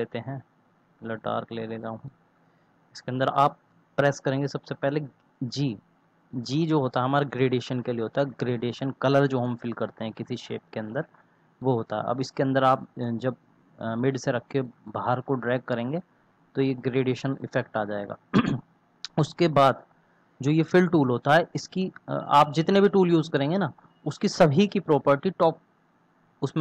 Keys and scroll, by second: 5.4 g.